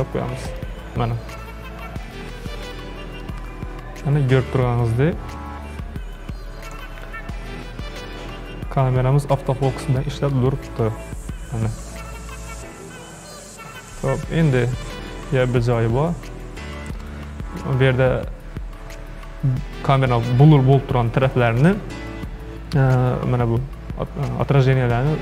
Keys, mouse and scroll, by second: 0.5 click, 2.1 click, 3.2-6.3 shift+middle drag, 10.4-13.4 shift+middle drag.